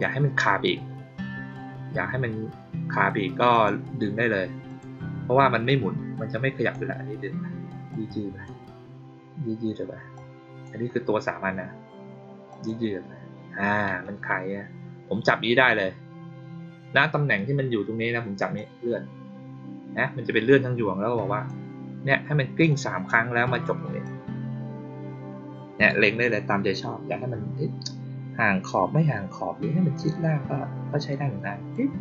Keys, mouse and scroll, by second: 3.4 click, 4.6 click, 5.6-6.6 drag, 7.8 click, 10.1 click, 12.4 click, 18.5-21.4 drag, 22.6-23.0 drag, 24.0-31.6 drag.